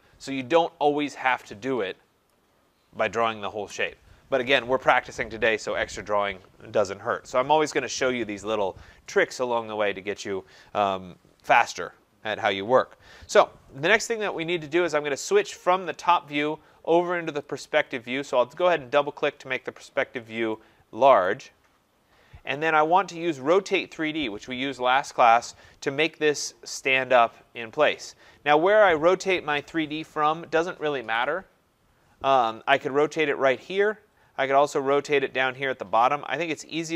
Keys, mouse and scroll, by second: 1.0 Escape, 1.2 Escape, 2.3 click, 3.6 Delete, 17.4 click, 17.6 click, 19.1-20.6 scroll, 21.3 right click, 21.6 middle click, 21.7 middle click, 22.0 middle click, 22.1 middle click, 23.4 click.